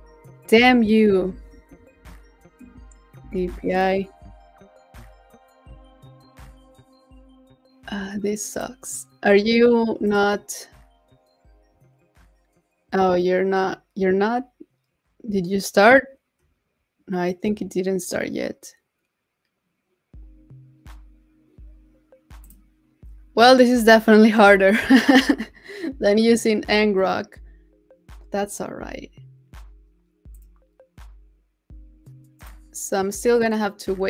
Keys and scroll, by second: 1.2 super+t, 1.6 super+v.